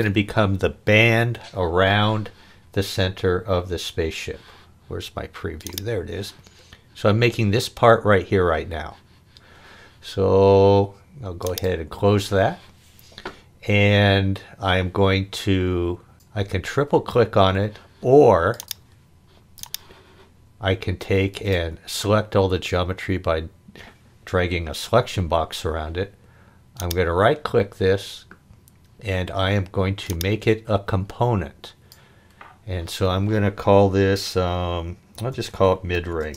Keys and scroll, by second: 35.1-36.3 typing.